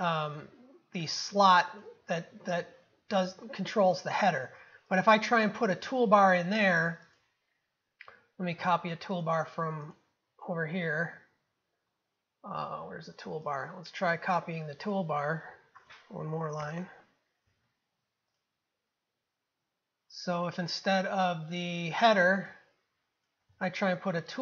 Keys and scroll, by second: 17.5 ctrl+c, 23.5 ctrl+v.